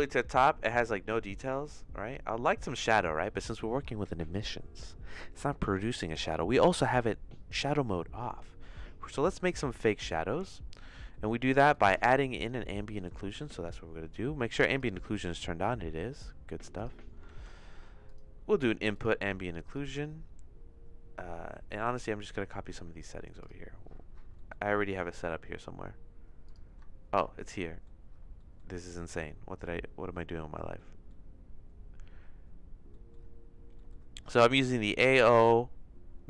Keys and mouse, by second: 12.2 click, 12.8 middle click, 13.2 shift+a, 14.7 click, 16.8 click, 17.2 shift+a, 21.7 middle click, 26.4 click, 26.7 Tab, 27.6 middle click, 28.4 middle click, 30.7 middle click, 32.9 middle click, 33.8 middle click, 35.1 middle click.